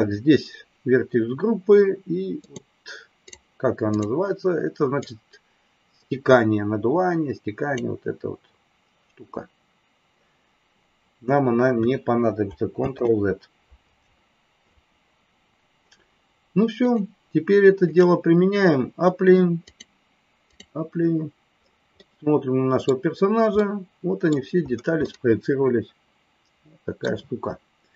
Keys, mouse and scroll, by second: 2.3-4.1 drag, 5.1-9.1 drag, 14.9 ctrl+z, 16.8-18.3 drag, 19.7-21.1 drag, 22.0 middle click, 23.6 middle click, 25.1-27.1 middle drag, 27.8-27.9 drag.